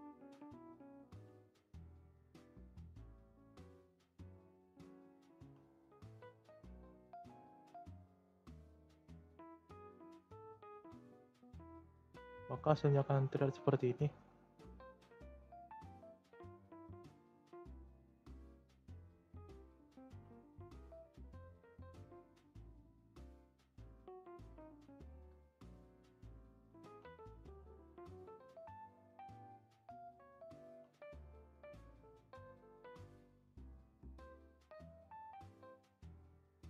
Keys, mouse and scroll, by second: 1.0 ctrl+a, 2.6 click, 3.7 e, 5.3 ctrl+a, 7.9 g, 9.3 scroll down 2, 9.7 shift+middle click, 10.1 scroll down 5, 10.3 shift+scroll up 1, 10.4 shift+middle click, 10.8 Tab, 11.1 click, 11.4-12.7 middle drag, 12.7 scroll up 4, 13.6 alt+z, 13.9 scroll down 2, 14.1-14.9 middle drag, 14.9-15.2 scroll down 2, 15.2-16.0 shift+middle drag, 16.0 alt+z, 16.4-16.8 middle drag, 16.8 shift+scroll up 1, 16.9-17.3 shift+middle drag, 17.3 click, 17.7 scroll up 1, 18.3 Tab, 19.1 click, 19.4-20.0 middle drag, 20.0 ctrl+a, 21.3 shift+scroll up 1, 21.4-21.9 shift+middle drag, 21.9-22.4 scroll down 2, 22.5 e, 24.9 middle click, 25.6-26.8 scroll up 3, 25.7 shift+middle click, 26.8 ctrl+a, 28.4 ctrl+a, 29.5 click, 30.0-30.6 scroll down 2, 30.6 ctrl+a, 35.8 scroll up 1, 35.9 middle click, 36.3 g.